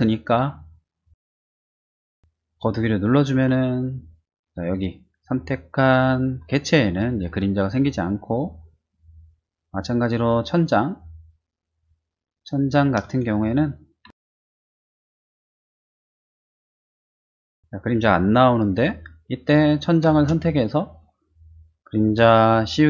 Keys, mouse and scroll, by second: 9.1-10.2 middle drag, 10.9 middle click, 11.0 middle click, 11.4 middle click, 13.3 shift+middle click, 14.0 shift+z, 14.2 middle click, 14.7 click, 15.0 click, 15.5 middle click, 20.1 space, 20.4 click.